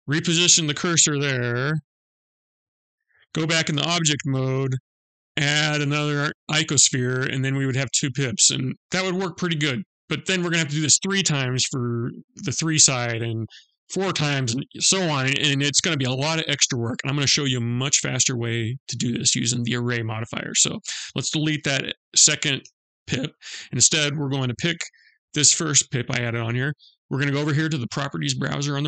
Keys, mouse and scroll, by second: 1.3 shift+s, 3.2 Tab, 4.2 shift+a, 7.3 middle click, 17.7 middle click, 20.1 click, 22.1 Delete, 22.6 middle click, 24.1 click, 24.9 middle click, 25.8 scroll down 1, 27.1-28.1 scroll up 2.